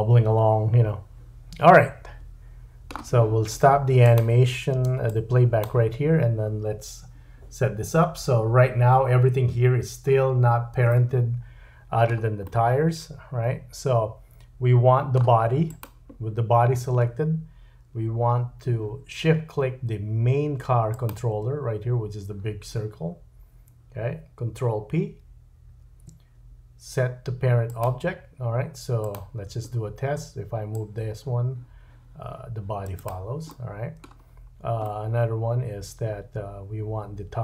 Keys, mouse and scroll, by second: 4.1 click, 4.8 space, 5.1 click, 9.8-10.5 scroll up 3, 10.5-10.9 scroll down 1, 10.9 middle click, 12.4 middle click, 15.9-19.3 drag, 19.3 shift+right click, 20.9 shift+click, 25.7 ctrl+p, 29.0 click, 29.7-30.7 scroll down 2, 30.7-33.0 drag, 33.5 middle click, 34.2-34.8 scroll up 3, 34.8 middle click.